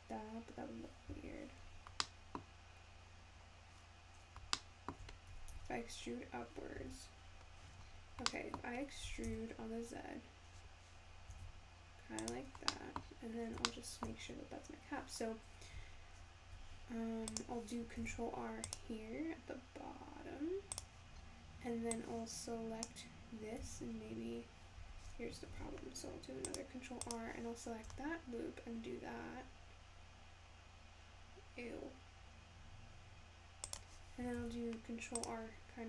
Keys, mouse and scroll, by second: 1.6-2.0 scroll up 2, 2.0 middle click, 2.9 scroll up 1, 3.1-4.7 scroll down 2, 4.7 shift+middle click, 5.3 e, 7.8 scroll down 4, 8.3 middle click, 9.1 e, 12.6 scroll down 1, 12.8 middle click, 13.1 scroll up 4, 13.7 shift+middle click, 14.5-15.6 scroll up 1, 15.6 `, 17.3 click, 18.0 ctrl+r, 21.2-21.9 scroll up 2, 21.9 click, 23.6 s, 25.6 ctrl+r, 27.9 s, 34.4 ctrl+r.